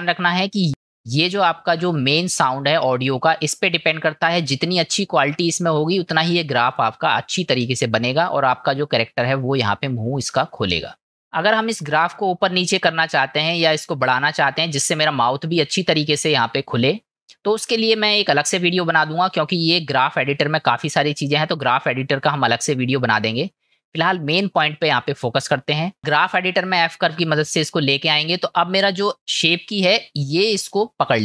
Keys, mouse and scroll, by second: 2.0 middle click.